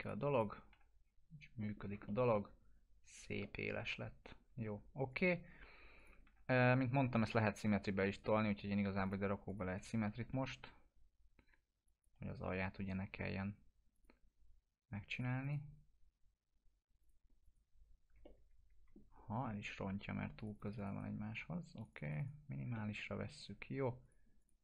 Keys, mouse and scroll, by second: 0.7 F4, 1.6 middle click, 1.8 scroll down 1, 2.0-2.7 alt+middle drag, 3.4-4.6 alt+middle drag, 5.1 click, 6.2 F4, 6.6 middle click, 8.1 click, 9.6 s, 9.8-10.6 s, 11.8 click, 18.2-19.1 alt+middle drag, 20.4 click, 22.7-23.3 alt+middle click, 24.0 click.